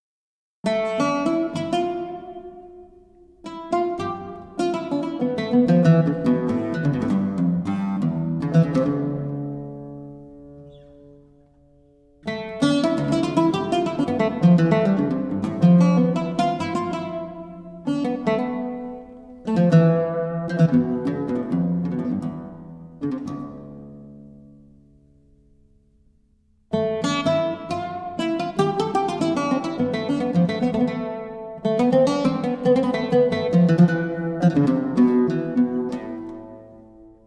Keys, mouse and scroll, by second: 3.3-12.4 drag, 13.2-15.9 drag, 15.9 ctrl+z, 17.4-36.4 drag.